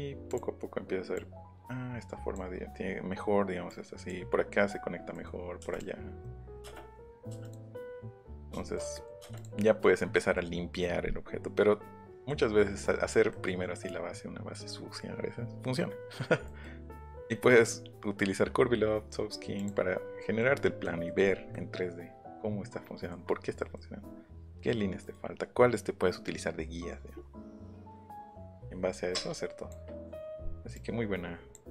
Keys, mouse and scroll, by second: 0.3 click, 1.1-2.3 drag, 3.6 click, 5.0 middle click, 5.7 click, 6.2 shift+middle click, 7.4 click, 8.3 click, 9.3 click, 10.0 scroll down 1, 10.2 scroll up 1, 11.5 scroll down 1, 11.7-12.2 scroll up 2, 12.6 middle click, 13.0 middle click, 13.3 middle click, 16.4 middle click, 16.8 middle click, 19.5 click, 20.2 middle click, 20.6 scroll down 1, 20.8 middle click, 21.2 scroll down 1, 21.5-23.1 middle drag, 23.6 middle click, 25.0 middle click, 27.1 middle click, 27.4 middle click, 29.2 click, 30.7 click.